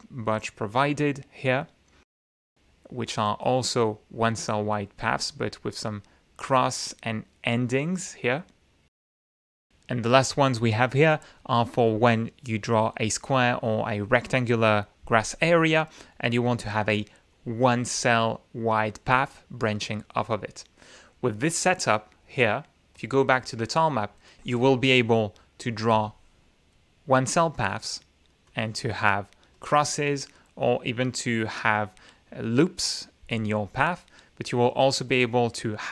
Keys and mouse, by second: 0.7-1.6 drag, 10.8-12.5 drag, 12.7 click, 13.4-14.5 drag, 14.8 click, 15.2 click, 16.0-17.1 drag, 18.0 click, 18.5-19.3 drag, 19.3-20.3 drag, 23.5 click, 25.6 click, 27.0-27.9 shift+drag, 28.5-29.0 shift+drag, 29.4-29.9 shift+drag, 30.5 shift+click.